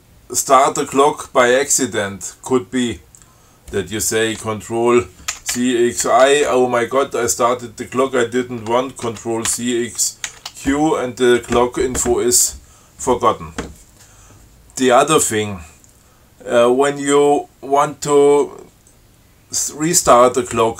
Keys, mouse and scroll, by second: 5.6 ctrl+c, 5.8 ctrl+x, 6.3 ctrl+i, 9.3 ctrl+c, 9.8 ctrl+x, 10.5 ctrl+q.